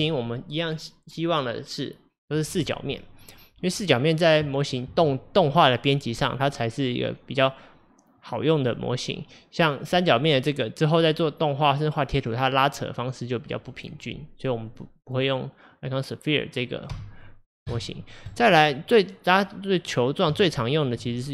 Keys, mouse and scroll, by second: 9.9 click, 14.7 drag, 15.1 click, 16.9 x, 18.3 click, 19.0-20.0 middle drag, 20.0-20.5 scroll up 4, 20.5-21.3 shift+middle drag.